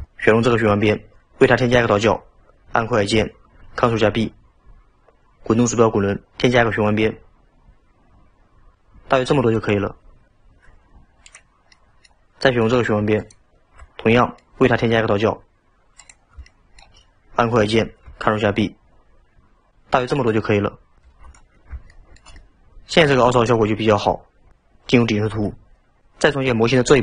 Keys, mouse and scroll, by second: 3.6 ctrl+b, 11.4 click, 11.8-13.2 middle drag, 13.2 alt+click, 14.2-16.0 middle drag, 16.0 click, 16.5-18.2 shift+middle drag, 18.2 ctrl+b, 21.1 Tab, 22.0-24.6 shift+middle drag, 25.4 KP_7.